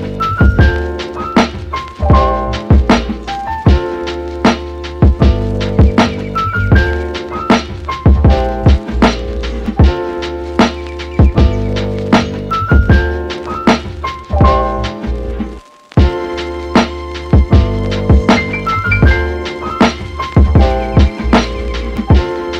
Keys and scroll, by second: 5.7 super+z, 12.2 super+s, 12.7 Right, 13.0 BackSpace, 13.2 8, 13.7 Return.